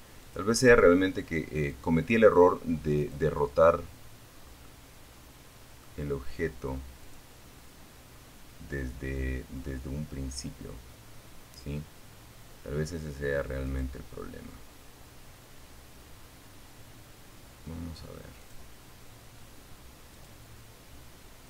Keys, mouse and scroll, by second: 1.1 click, 2.6 scroll down 1, 2.8-4.1 middle drag, 5.2 click, 11.8 click, 16.5 click, 18.3 click, 19.6 click.